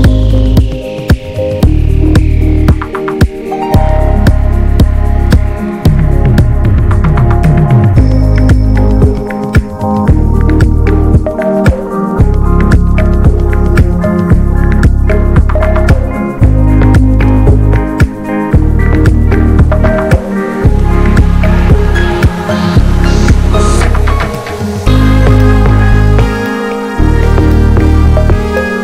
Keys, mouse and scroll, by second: 0.5 click, 1.0 middle click, 1.4 click, 2.3 middle click, 2.7-3.8 drag, 3.8 middle click, 4.2-5.3 drag, 5.3 middle click, 5.8-7.8 drag, 7.8 middle click, 8.5 click, 8.9 middle click, 9.5-10.0 scroll up 2, 9.6 middle click, 10.0 click, 10.5 middle click, 11.3-12.4 drag, 12.4 shift+middle click, 13.1-14.1 drag, 14.1 shift+middle click, 14.6-15.6 drag, 15.6 middle click, 16.1 click, 16.6 middle click, 17.2-17.5 shift+scroll up 1, 17.5-18.7 drag, 18.7 middle click, 19.5-21.0 drag, 21.0-22.3 middle drag, 22.3-23.9 drag, 23.9 scroll down 2, 24.1 middle click, 24.8-26.0 drag, 26.0 middle click, 26.4 click, 26.8 middle click, 27.3 click, 28.1 scroll down 1, 28.2 middle click, 28.4 scroll up 1, 28.6-28.8 drag.